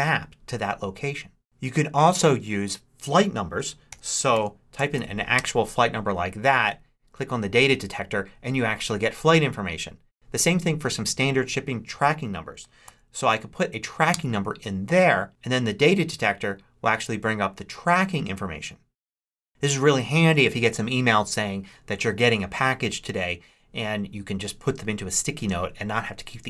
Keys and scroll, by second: 3.5-5.1 typing, 5.4 Return, 12.7 super+v, 14.0 Return.